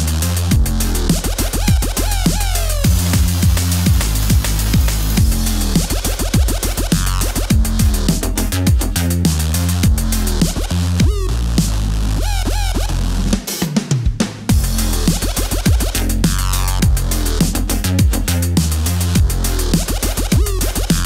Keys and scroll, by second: 1.5 super+s.